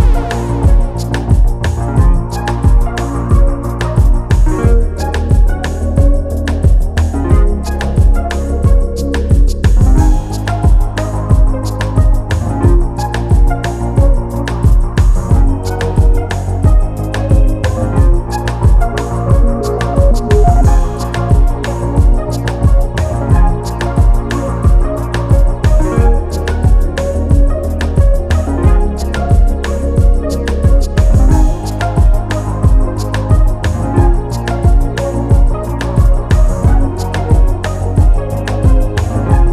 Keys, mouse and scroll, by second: 3.0 click, 4.9 click, 9.0 scroll up 1, 9.5 click, 10.2 scroll down 1, 11.1 click, 13.5 ctrl+q, 14.2 click, 15.3 scroll up 1, 16.3 click, 21.6 click, 34.5-34.9 scroll up 1, 35.0 click, 35.5-35.9 scroll down 1, 36.0 click, 37.7 click, 38.0 scroll up 1, 38.6 click.